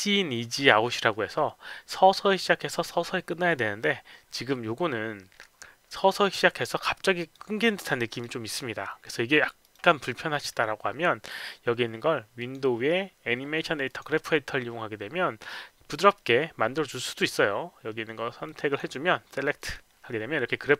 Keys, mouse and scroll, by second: 7.1 click, 8.0 click, 9.6 click, 12.3 click, 13.8 click, 18.4 click, 19.5 click, 20.4 middle click.